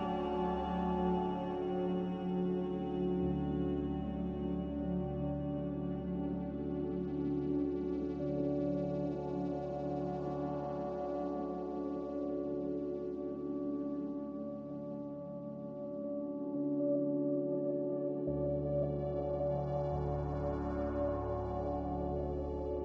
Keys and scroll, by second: 1.4 q, 2.7 q, 4.7 q, 15.5 a, 16.3 q.